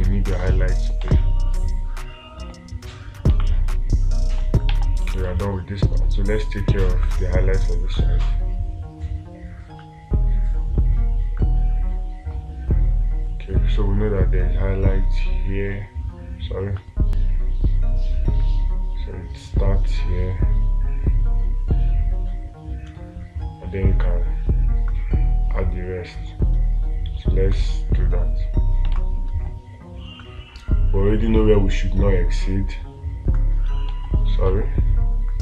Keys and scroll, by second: 0.8 space, 3.8 space, 5.2 ctrl+z, 5.7 space, 29.4 space, 34.4 ctrl+z.